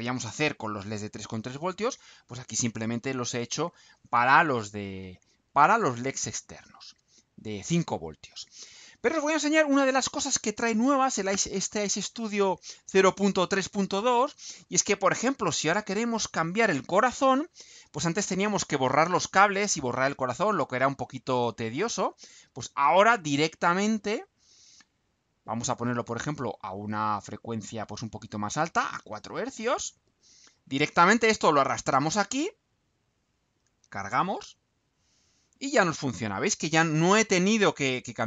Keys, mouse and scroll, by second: 28.6 click, 32.1 click, 34.2 ctrl+u.